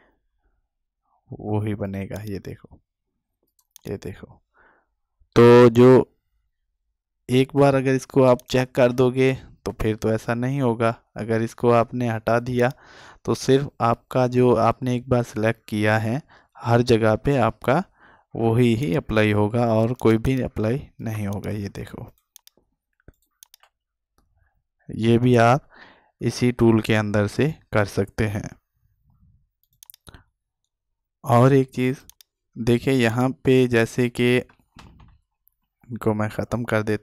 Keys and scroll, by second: 34.9 ctrl+alt+z.